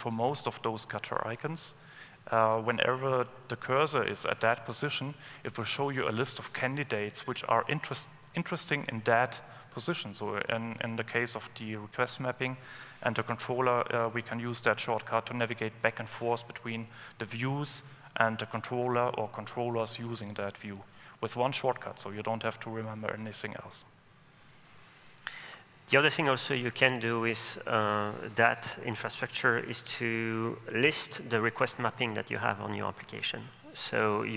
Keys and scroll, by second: 26.3 super+e.